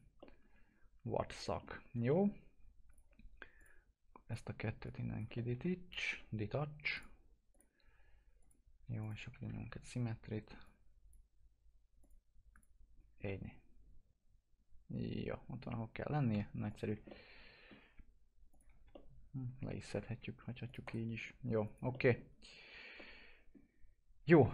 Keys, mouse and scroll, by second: 0.4-2.0 alt+middle drag, 2.8 click, 5.3 alt+middle click, 6.0 Delete, 6.9 click, 9.1 s, 10.6 click, 13.2-16.3 alt+middle drag, 16.3 p, 16.6 click, 16.8 scroll down 1, 17.0-18.4 alt+middle drag, 18.4 click, 18.6 alt+q, 18.9 alt+middle click, 19.8 F4, 20.1 scroll up 1, 20.6 click, 20.8 right click, 21.9-24.5 middle drag.